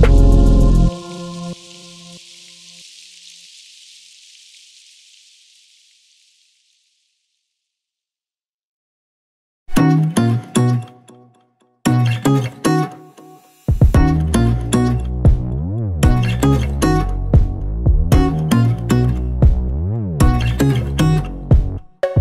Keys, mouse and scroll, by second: 2.0 scroll up 1, 2.6-5.4 shift+middle drag, 3.4 scroll up 1, 5.4 click, 9.8-13.2 drag, 13.9 scroll down 1, 16.6 click, 17.1 scroll down 1, 17.6 scroll up 1, 18.9-21.3 drag, 21.6-22.2 drag.